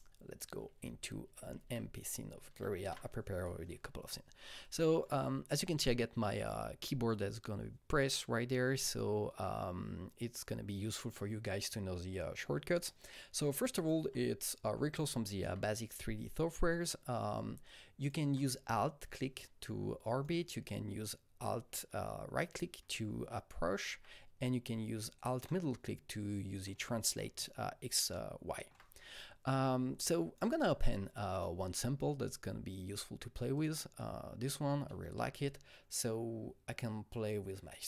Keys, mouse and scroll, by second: 0.6 alt+Tab, 0.6 Right, 0.8 alt+Tab, 1.3 alt+Tab, 1.4 alt+Tab, 2.2 alt+Tab, 4.6-7.6 alt+drag, 13.2 alt+shift+Tab, 13.2-28.1 alt+drag, 22.4 alt+right click, 22.9-28.1 alt+right drag, 25.5-27.2 alt+middle drag, 27.2 alt+double middle click, 28.4-33.5 alt+middle drag, 28.4-31.3 alt+right drag, 28.4-30.0 alt+drag, 30.0-33.5 alt+drag, 33.5-37.5 alt+drag, 37.5 alt+double click.